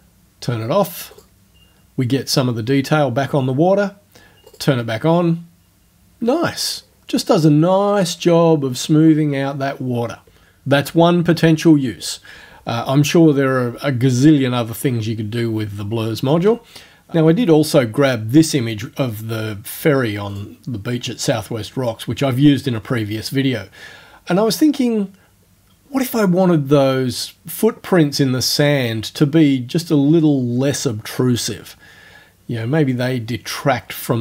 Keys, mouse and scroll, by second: 1.1 click, 4.5 click, 16.4 space, 20.3 click.